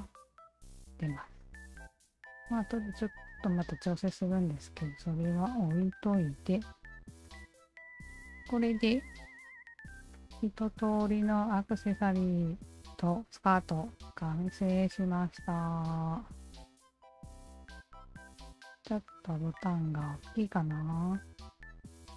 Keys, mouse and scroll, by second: 2.9-4.2 alt+drag, 4.4-4.8 alt+drag, 5.3 alt+right drag, 5.8-6.2 alt+drag, 7.2 alt+click, 7.9 alt+click, 8.4 alt+click, 8.9 alt+right click, 9.5-10.7 alt+drag, 10.9-12.5 alt+drag, 12.8-14.4 alt+drag, 15.6 alt+click, 16.0 alt+click, 16.2 alt+click, 16.5 alt+click, 16.9 alt+click, 17.2-18.4 alt+drag, 19.4 alt+click, 19.9-20.2 alt+right drag, 20.6-21.0 alt+middle drag, 21.0-21.4 alt+right drag, 21.8 click.